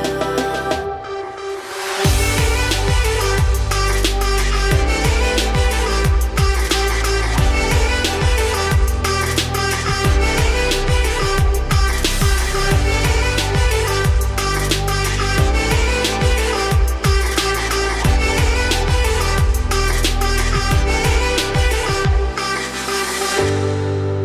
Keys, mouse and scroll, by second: 0.6 scroll up 3, 0.8 g, 3.3 Tab, 3.8-5.1 scroll down 14, 5.1 shift+middle drag, 5.3-5.6 shift+scroll up 2, 5.6 scroll down 1, 5.8 shift+middle click, 6.1-6.8 scroll up 5, 7.9 click, 8.5-9.3 shift+middle drag, 9.3 scroll up 1, 10.6 click, 11.5-15.8 drag, 18.8 click, 19.8-20.4 middle drag, 20.4 `, 21.3 z.